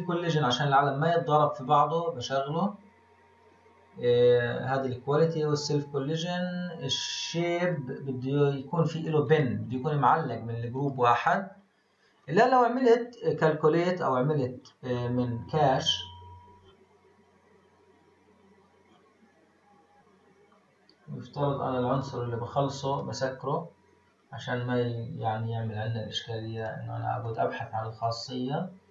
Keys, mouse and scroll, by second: 1.1 click, 2.3-3.1 scroll down 4, 6.0-7.6 scroll up 1, 7.6-11.6 drag, 11.6-12.2 scroll up 2, 12.2-14.6 scroll up 24, 14.6-16.6 scroll down 22, 16.6-18.4 scroll down 5, 18.4-19.1 scroll down 7, 19.7-20.5 scroll up 3, 20.5-21.9 scroll up 2, 21.9-24.0 drag, 24.0-25.1 scroll up 7, 25.1-26.5 scroll up 6, 26.5-28.4 drag, 28.4-28.9 scroll down 4.